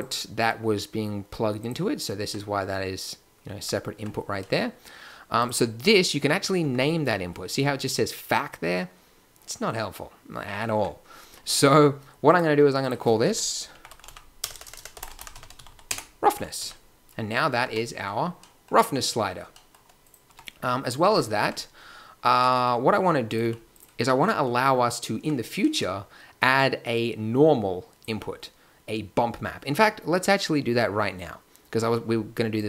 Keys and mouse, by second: 2.2 Tab, 3.4 click, 3.6 Tab, 4.0 Tab, 6.6 Tab, 10.7 Tab, 11.4 n, 14.5-16.6 typing, 17.6 Tab, 20.0 click, 20.2 Tab, 21.1 Tab, 21.4 Tab, 23.3 click, 23.4 g, 25.1 Tab.